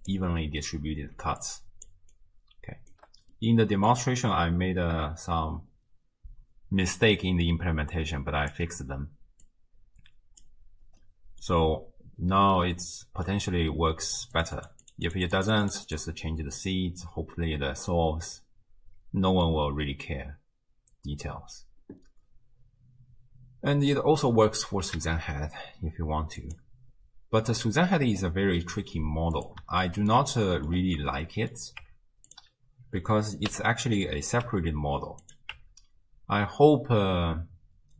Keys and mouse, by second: 0.0 click, 1.2-2.1 d, 1.4 click, 2.1 click, 2.9 d, 3.5-4.0 middle drag, 3.5 d, 7.9 click, 9.4-10.4 drag, 11.0-11.4 middle drag, 12.6-13.3 middle drag, 14.4 click, 14.9 click, 15.1 click, 15.5 click, 15.9 click, 18.0-19.5 middle drag, 25.0 shift+a, 29.4 click, 30.0 shift+middle click, 30.4-30.9 middle drag, 31.3 middle click, 31.8 Tab, 32.3 click, 33.5 l, 34.5 g, 35.6 Tab.